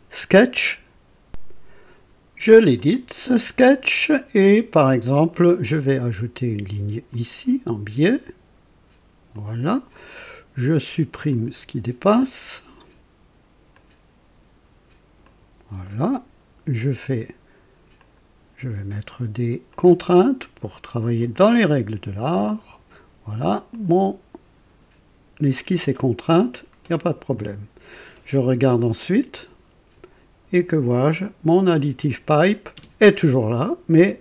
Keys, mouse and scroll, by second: 1.3 click, 2.5 click, 5.0 click, 7.1 click, 9.3 click, 9.9 right click, 11.3 click, 13.7 click, 15.2 click, 15.8 right click, 17.0 click, 18.0 click, 19.7 click, 21.2 click, 22.5 click, 23.7 click, 27.3 click, 31.2 click, 32.7 space.